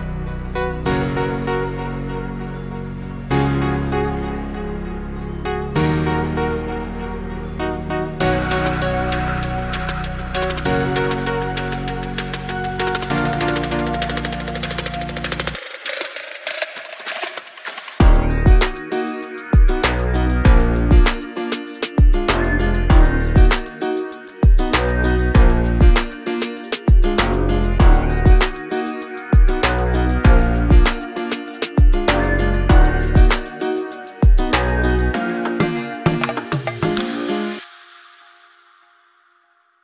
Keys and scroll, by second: 21.5 ctrl+j.